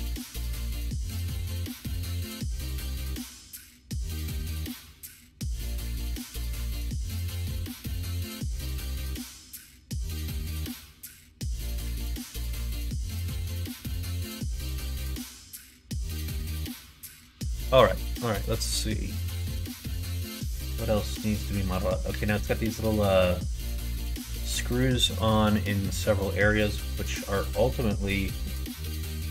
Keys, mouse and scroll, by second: 0.3 Tab, 0.6 right click, 1.9 click, 2.4 right click, 3.3 middle click, 4.2 right click, 5.4 click, 5.6 middle click, 6.4 shift+middle click, 6.9 middle click, 7.4 shift+middle click, 7.9 middle click, 8.5 middle click, 10.6 middle click, 11.4 shift+middle click, 11.9 middle click, 13.7 click, 14.2 Tab, 15.1-16.4 middle drag, 16.9 shift+middle click, 17.6 middle click, 18.1 shift+middle click, 18.5-19.7 middle drag, 25.1 middle click, 25.6 middle click, 26.1 shift+middle click.